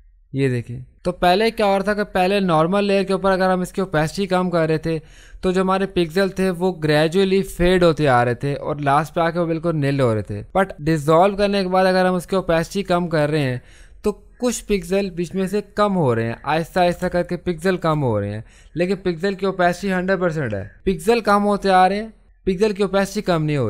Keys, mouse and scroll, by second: 17.0 ctrl+space, 17.2 ctrl+click, 17.5 ctrl+space, 20.7-23.6 drag.